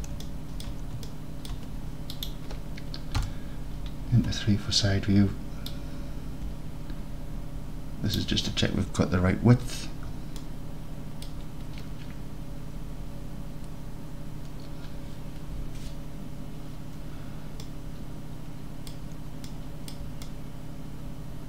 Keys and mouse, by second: 1.2 alt+click, 1.5 alt+click, 2.2 click, 3.2 KP_3, 5.7-8.2 middle drag, 10.4 alt+drag, 10.8 alt+click, 17.8 alt+drag, 18.3 alt+drag, 18.9 click, 19.6 drag, 19.8 click, 20.3 alt+click, 20.5 alt+click, 20.7 alt+click, 21.1 alt+click.